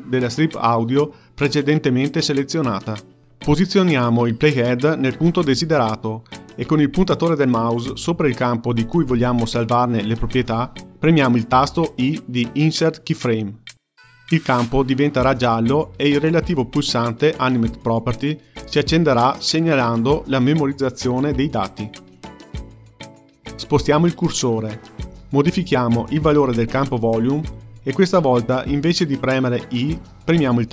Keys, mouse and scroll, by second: 1.7-7.2 ctrl+middle drag, 25.3-30.7 drag.